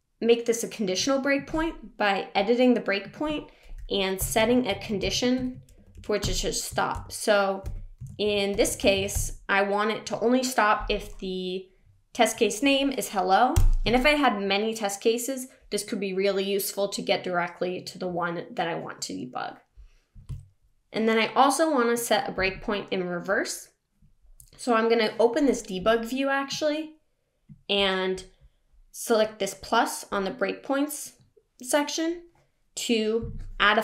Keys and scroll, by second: 7.6 BackSpace, 13.6 Return.